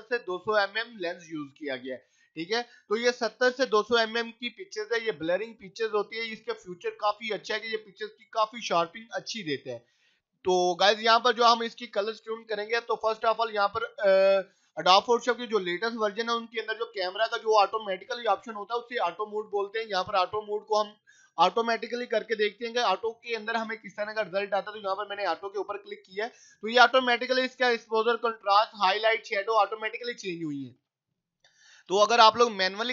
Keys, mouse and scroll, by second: 21.6 click, 30.7 click, 31.8 scroll down 1, 32.1 right click, 32.8 click.